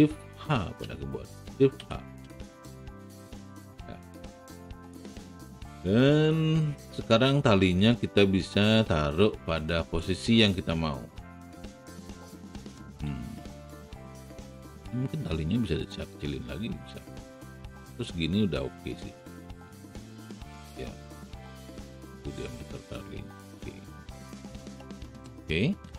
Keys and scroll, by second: 1.7 shift+h, 12.8 r, 25.8 w.